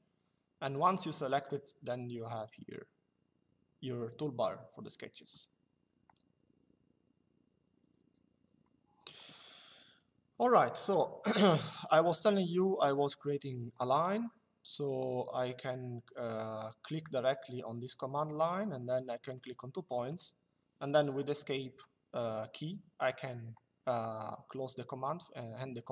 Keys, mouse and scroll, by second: 18.1 click, 21.2 Escape, 25.7 click.